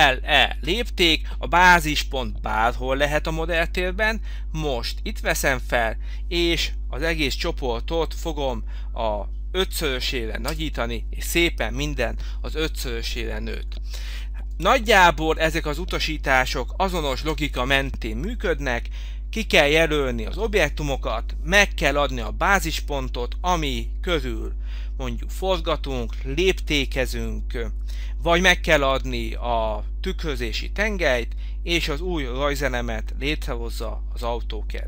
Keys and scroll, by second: 0.7 Return, 10.5 Return, 17.3 Delete.